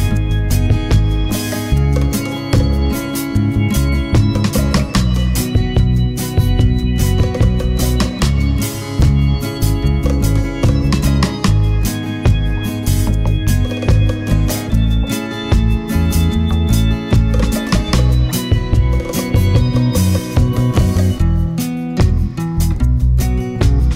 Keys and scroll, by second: 12.1 super+z.